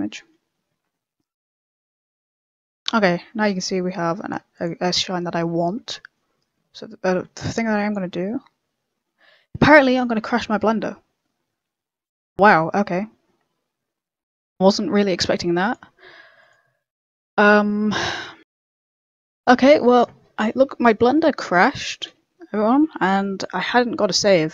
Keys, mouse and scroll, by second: 5.7 KP_0, 6.5 middle click, 7.5 click.